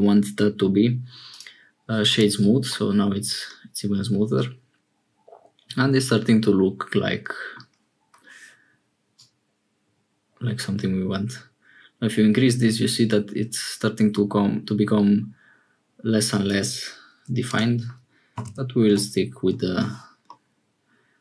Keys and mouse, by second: 2.0 click, 2.7-7.6 middle drag, 9.2-16.5 drag, 17.4-19.5 drag, 20.2-21.2 middle drag.